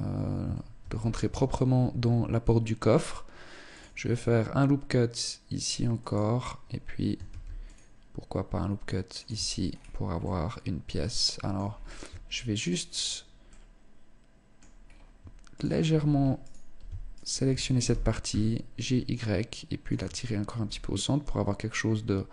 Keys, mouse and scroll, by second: 0.2 ctrl+r, 6.7 ctrl+r, 8.8 Tab, 9.1 scroll down 4, 9.6 middle click, 11.1 scroll up 4, 11.5 Tab, 11.9 right click, 12.9 middle click, 14.3 scroll up 2, 14.9 shift+right click, 15.8 alt+right click, 16.5 shift+right click, 17.3 g, 19.3 click, 19.4 Tab, 19.7-20.0 scroll down 4, 20.1 middle click.